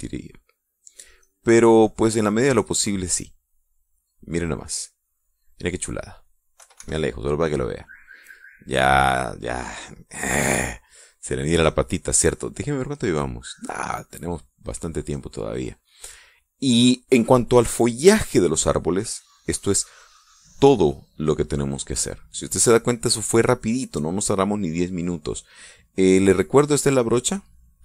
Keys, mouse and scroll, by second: 1.7 click, 3.4-4.8 middle drag, 4.8 middle click, 5.7-7.2 middle drag, 7.4 KP_Subtract, 13.6 click, 14.2 click, 15.0 middle click, 15.8 click, 16.4-17.9 drag, 25.6-26.8 drag.